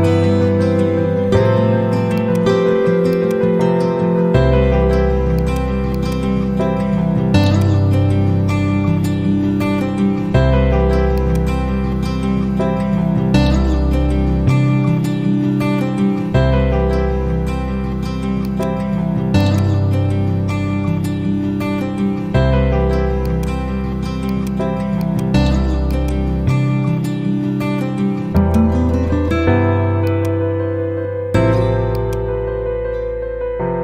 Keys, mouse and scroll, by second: 0.3 ctrl+Page_Down, 2.1 click, 4.4 Page_Down, 5.3 click, 7.4-8.6 drag, 9.5 typing, 11.1-12.0 drag, 12.5 Left, 18.4 click, 19.0 z, 19.3-20.5 drag, 23.2 click, 25.4 z, 25.8-27.0 drag.